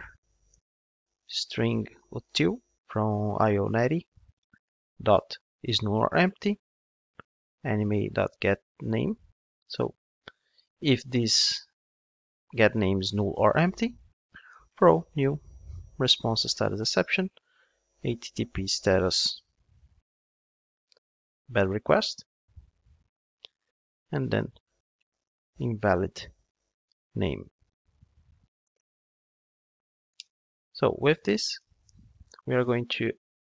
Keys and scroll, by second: 3.7 Return, 16.7 Return, 22.3 Return.